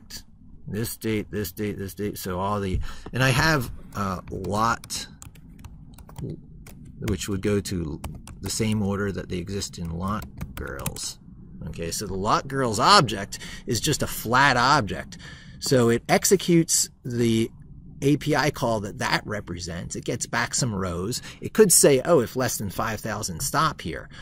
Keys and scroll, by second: 5.2 ctrl+a.